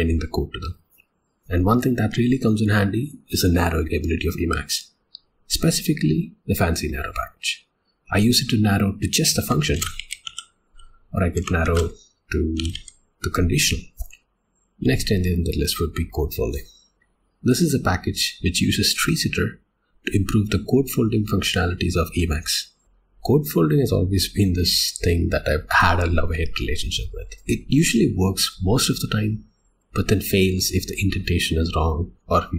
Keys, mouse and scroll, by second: 14.2 click.